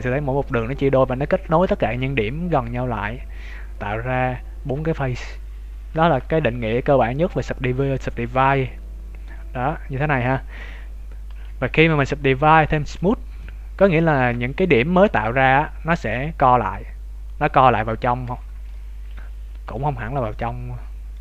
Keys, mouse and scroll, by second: 5.9 shift+middle click, 6.4 middle click, 11.2 ctrl+z, 11.6 w, 13.4 middle click, 18.4-18.8 scroll down 3, 18.6 middle click, 20.0 z, 20.2 middle click.